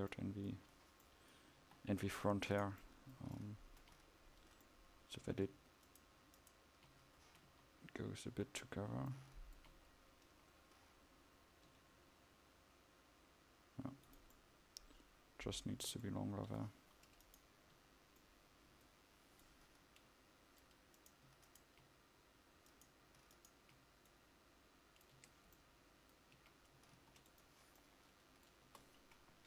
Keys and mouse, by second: 1.6 KP_5, 5.5 Tab, 7.6 KP_1, 8.5 KP_5, 11.9 g, 17.8 KP_5, 25.3 Tab, 26.6 a, 27.0 ctrl+s, 28.7 KP_0.